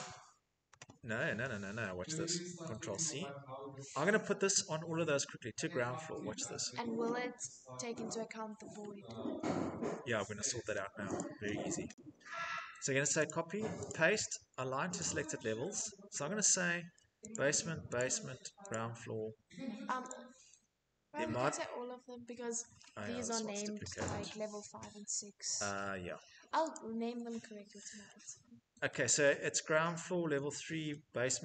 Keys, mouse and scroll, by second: 2.5 c, 4.6 middle click, 4.7 middle click, 7.0 middle click, 7.2 middle click, 8.3 middle click, 8.4 middle click, 8.9 middle click, 9.1 middle click, 9.2 Escape, 9.5 Escape, 9.8 middle click, 10.8 middle click, 12.9 click, 13.5 click, 14.6 click, 16.9 click, 17.6 click, 18.3 click, 19.7 click, 22.2-22.6 scroll, 22.9 Escape, 23.8 click, 25.4 Delete, 26.3 click, 26.7 middle click, 26.7 middle click, 26.8 middle click, 27.1 Escape, 27.7 middle click, 28.8 middle click, 29.6 middle click, 29.7 middle click, 29.8 middle click, 30.5 middle click, 30.9 middle click, 31.2 Escape, 31.3 middle click.